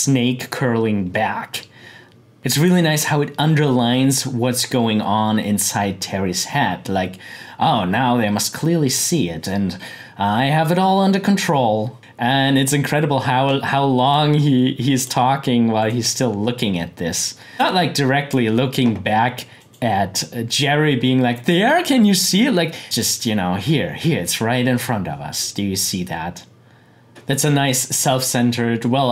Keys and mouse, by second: 2.4 click, 14.1-19.5 drag, 22.8 click, 27.1 click.